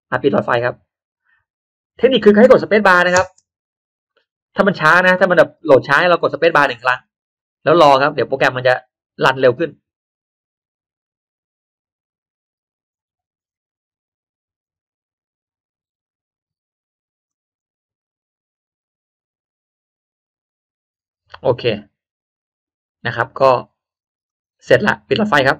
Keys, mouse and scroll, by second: 0.5 click, 3.2 space, 7.8 middle click, 20.5 click, 21.8-22.1 scroll up 1, 22.5-22.9 scroll down 1, 24.2 click, 25.1 click.